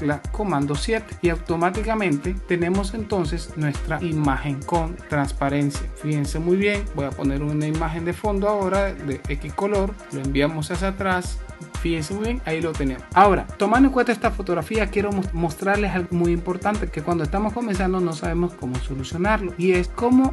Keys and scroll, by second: 0.5 super+7.